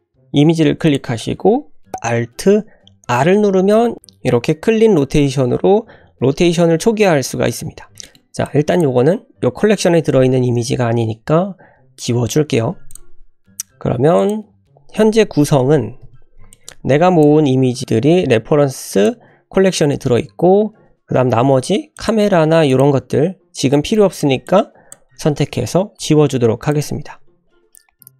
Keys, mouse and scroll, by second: 0.8 click, 3.1 alt+r, 7.9 scroll down 4, 8.0 shift+click, 8.0 shift+middle click, 8.4-8.8 drag, 12.0 Delete, 12.8 click, 14.1 click, 16.0 n, 16.4-17.3 drag, 18.9 click, 22.0 click, 22.7 shift+click, 23.6 scroll down 1, 23.7 middle drag, 24.1 click, 24.5-25.0 drag, 26.0 Delete, 26.7 click, 28.0 click.